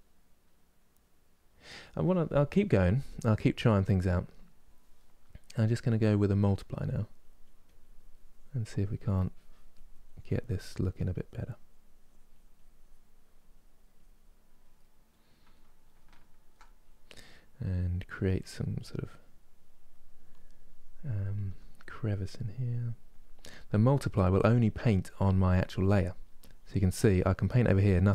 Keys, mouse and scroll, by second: 2.7-4.7 drag, 4.7-6.5 middle drag, 6.5-14.5 drag, 14.5-17.8 middle drag, 17.8 f, 18.6-21.1 drag, 21.1 f, 21.6-24.6 drag, 24.7-25.7 drag, 25.7 middle click, 26.1-27.8 drag, 27.8-28.1 middle drag.